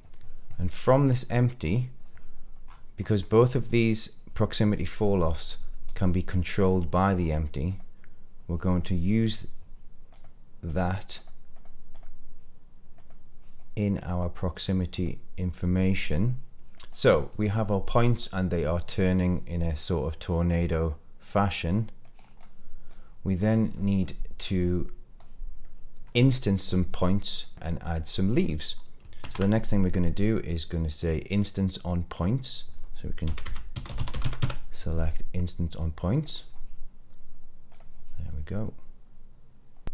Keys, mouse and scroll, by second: 1.5 click, 2.6-3.2 scroll up 4, 3.1 middle click, 7.6 click, 8.6 click, 10.0 click, 11.1 click, 11.8-13.0 drag, 14.0-15.0 drag, 16.2 middle click, 16.7-17.5 scroll down 5, 17.5-18.8 middle drag, 19.8-20.4 drag, 20.8 click, 21.9-22.3 drag, 22.8 click, 23.7 middle click, 24.4 click, 25.5 middle click, 26.9-27.4 middle drag, 27.5 scroll up 1, 27.5 click, 28.0 middle click, 29.1 shift+a.